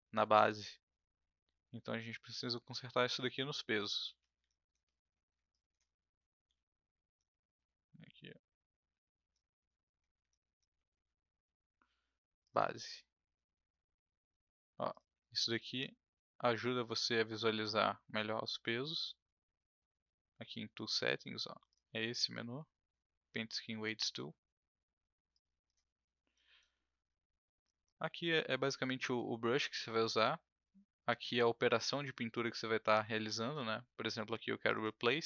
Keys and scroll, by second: 4.0 ctrl+z, 6.4 w.